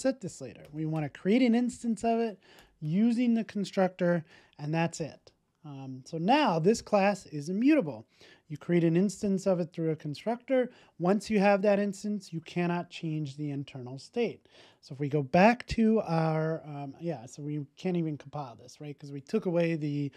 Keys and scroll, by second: 4.2 super+s.